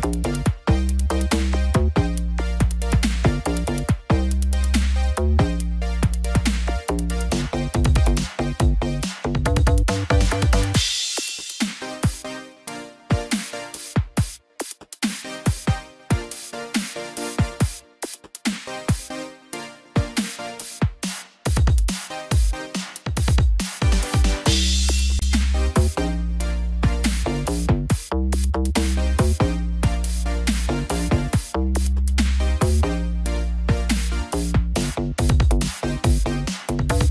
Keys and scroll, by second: 4.8 ctrl+0.